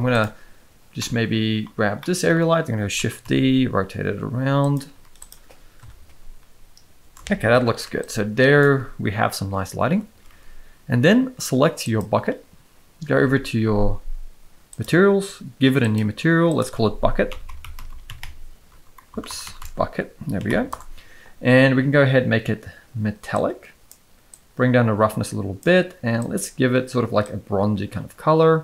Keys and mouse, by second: 0.9-1.6 middle drag, 1.9 middle click, 2.9 shift+d, 4.9 z, 5.8 KP_0, 7.6 ctrl+b, 10.2 ctrl+s, 10.4 ctrl+s, 14.7 click, 16.5-20.7 drag, 17.9 k, 19.2 BackSpace, 19.4 BackSpace, 23.3 click, 24.3-25.6 drag, 26.2 click.